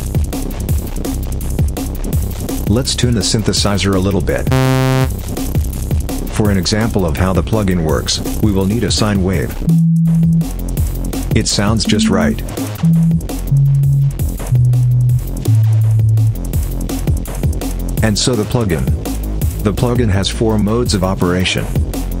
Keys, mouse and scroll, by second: 1.8 click, 4.3 click, 6.6-7.2 drag, 8.0 click, 9.4 click, 11.6 click, 12.6 click, 13.3 click, 14.3 click, 15.2 click, 17.4 click.